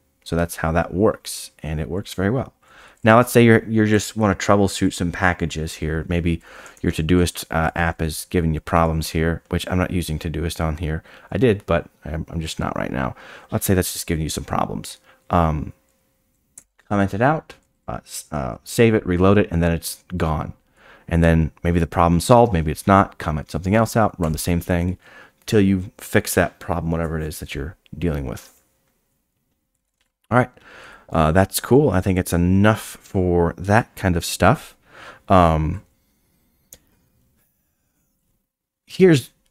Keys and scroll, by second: 6.7 shift+o, 7.9 d, 8.8 i, 24.2 x, 30.8 Escape.